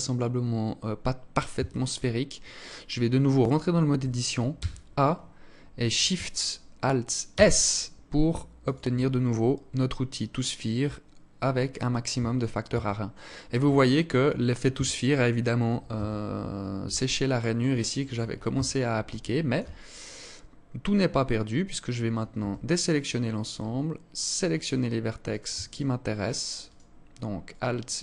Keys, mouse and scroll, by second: 0.9 Tab, 3.8 a, 6.6 alt+shift+s, 11.5 Tab, 12.0 Tab, 12.6-13.1 scroll up 3, 13.1 alt+click, 14.1 Tab, 15.3 Tab, 16.4 alt+click, 17.2 alt+click, 17.9 Tab, 18.5 alt+shift+click, 19.1 scroll up 5, 19.9 scroll up 2, 20.7-21.5 scroll down 2, 21.9 a, 24.6 alt+right click, 25.1 alt+shift+right click.